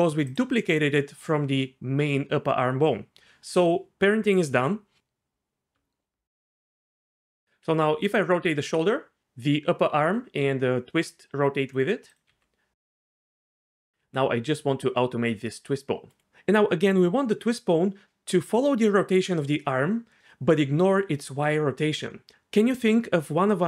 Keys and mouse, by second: 5.7 Tab, 7.7 r, 12.1 click, 12.3 r.